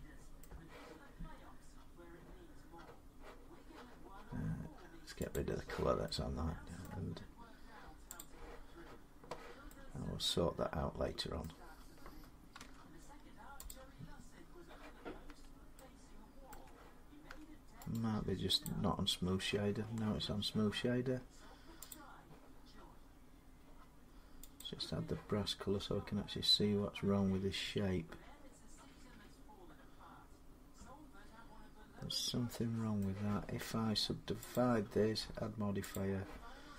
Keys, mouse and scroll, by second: 0.6-5.2 middle drag, 5.2-6.6 drag, 6.6 middle click, 7.1 scroll, 8.0 click, 10.5 scroll up 3, 11.2 middle click, 12.4 Tab, 13.5 click, 15.1 Tab, 16.3 Tab, 17.1 Tab, 17.7 right click, 18.5 click, 21.7 click, 24.4 click, 27.7-28.9 drag, 29.4 click, 32.8 middle click, 34.3 click, 35.7 click.